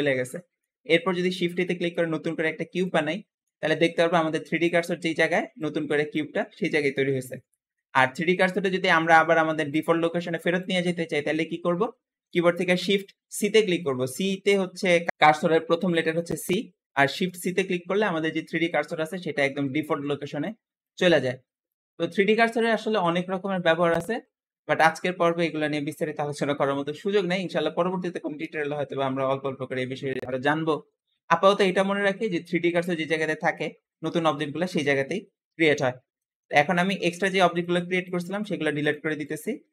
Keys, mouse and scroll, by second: 0.3-1.4 shift+middle drag, 1.4 shift+a, 3.0-3.9 middle drag, 3.9 scroll down 1, 4.0-7.2 scroll up 1, 7.2-7.6 scroll down 4, 7.6 shift+middle click, 8.0-9.1 scroll up 4, 9.1-11.3 scroll up 1, 11.4-11.9 scroll down 2, 11.9-15.0 shift+middle drag, 17.3 shift+c, 18.2-18.7 scroll up 2, 18.7-19.2 shift+middle drag, 19.2-21.7 scroll up 2, 35.5-36.0 scroll down 4, 36.0-36.7 shift+middle drag, 36.7 click, 37.1 x, 37.8 click, 38.1 x, 38.7 click, 38.9 x, 39.6 click.